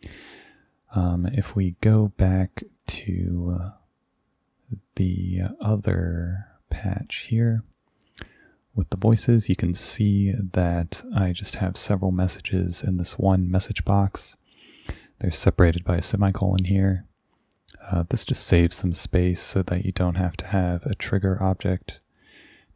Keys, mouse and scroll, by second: 2.8 click, 5.8 click, 7.1 click, 8.2 click, 22.0 click.